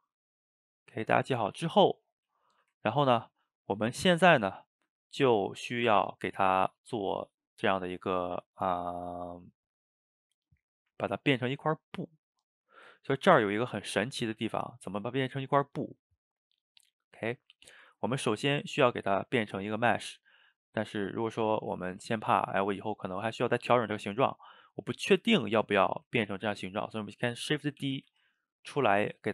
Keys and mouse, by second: 0.1-3.5 ctrl+middle drag, 3.5 click, 12.4 middle click, 12.7 shift+right click, 13.0-16.3 ctrl+middle drag, 16.8-25.3 middle drag, 26.2-27.8 ctrl+middle drag, 27.8 shift+d, 29.1-29.3 shift+middle drag.